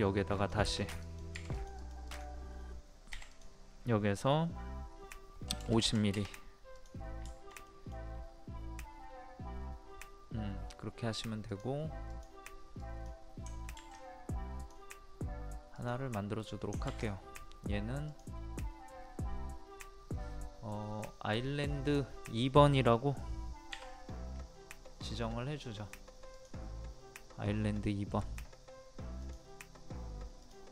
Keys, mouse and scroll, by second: 3.1 p, 3.3 click, 5.5 KP_5, 6.7 click, 7.3 shift+middle click, 11.5 click, 14.6 click, 18.1 click, 23.7 2, 26.3 click, 27.7 middle click, 28.1 click.